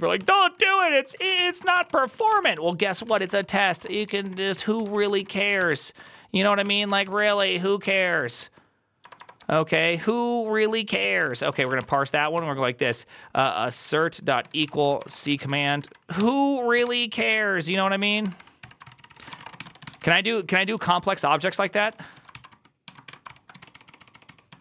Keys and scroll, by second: 0.0-9.3 typing, 0.2 ctrl+c, 10.7-24.6 typing.